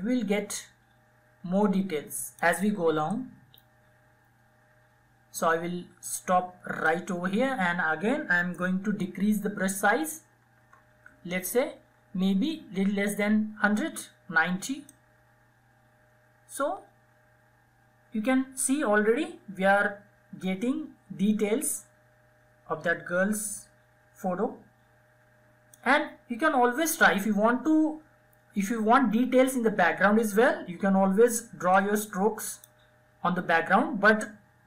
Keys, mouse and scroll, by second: 9.0 [, 9.2 [, 9.3 [, 9.5 [, 10.7 [, 13.6-23.7 drag, 30.5-34.3 drag, 34.3-34.6 drag.